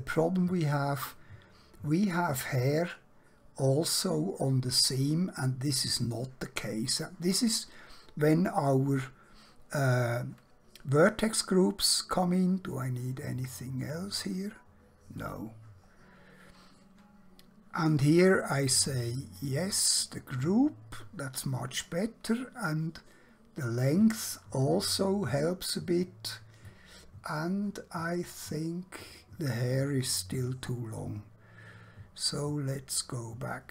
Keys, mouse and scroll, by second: 8.3-10.5 scroll down 1, 15.3 click, 16.0 scroll down 1, 18.0 click, 21.8 click, 26.7 middle click, 31.1 scroll up 1.